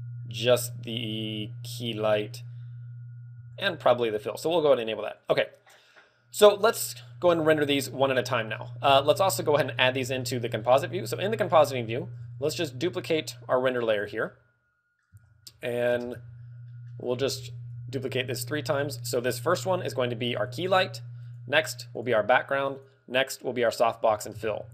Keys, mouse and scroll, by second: 3.7 shift+click, 5.3 click, 7.0 scroll down 4, 7.4 shift+middle click, 7.9-8.3 scroll down 3, 8.3 middle click, 8.5-9.2 scroll up 6, 9.2 middle click, 9.7 click, 10.0-10.4 scroll up 2, 10.4 middle click, 12.0 shift+d, 14.4 click, 14.5 middle click, 15.4 scroll down 3.